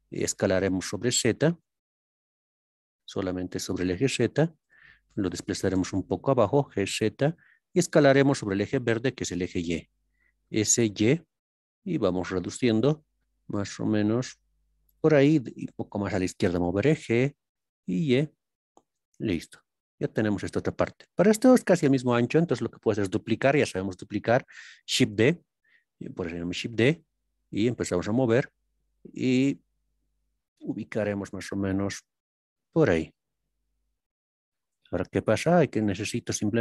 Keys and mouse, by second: 5.7 z, 6.9 click, 10.8 y, 14.9 click, 16.7 y, 19.3-22.4 drag, 25.1 shift+d, 34.1-36.3 drag.